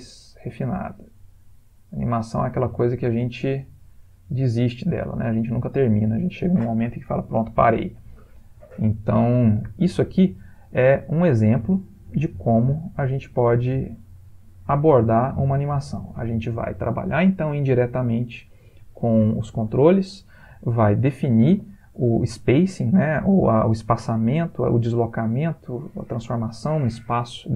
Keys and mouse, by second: 3.1 space, 9.8 Escape, 11.0 ctrl+middle click, 11.4 ctrl+middle click, 11.9 ctrl+middle click, 12.8 click.